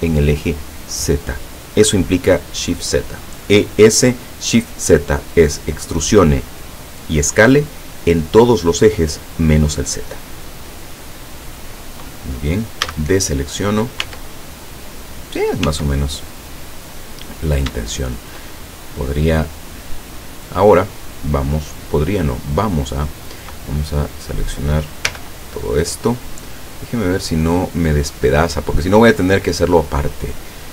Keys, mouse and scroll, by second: 10.3-10.7 scroll down 2, 10.9-12.1 middle drag, 12.9 a, 13.5 middle click, 14.1 Tab, 15.7 Tab, 16.5 middle click, 17.4-18.1 scroll up 3, 17.8 shift+middle click, 18.4 shift+click, 20.4 scroll down 2, 23.4 scroll down 2, 24.0 right click, 25.2 l, 25.9-26.7 scroll down 4, 26.7-27.3 scroll up 2, 28.5 click, 29.6 click.